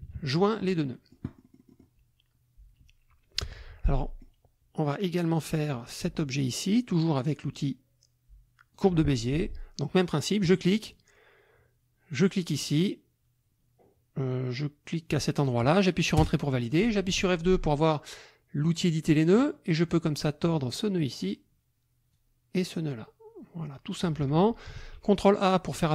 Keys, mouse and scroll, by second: 0.9-2.0 drag, 3.9 click, 8.7 click, 10.4 click, 12.1 click, 15.4 click, 16.2 Return, 17.0 F2, 19.9-21.4 drag, 22.1-24.2 drag, 24.8 ctrl+a, 25.8-25.9 drag.